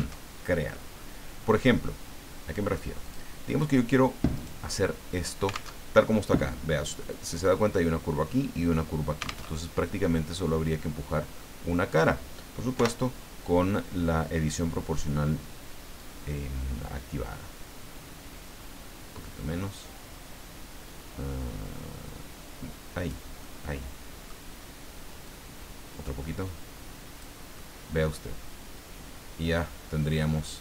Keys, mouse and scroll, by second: 0.2 alt+Tab, 3.0 click, 4.3 right click, 5.7 alt+Tab, 9.5 alt+Tab, 10.0-12.0 middle drag, 12.7 o, 15.9-18.4 drag, 18.4-18.7 scroll up 2, 21.9-23.4 scroll down 2, 23.4-24.4 middle drag, 25.2-27.4 drag, 27.5-30.6 middle drag.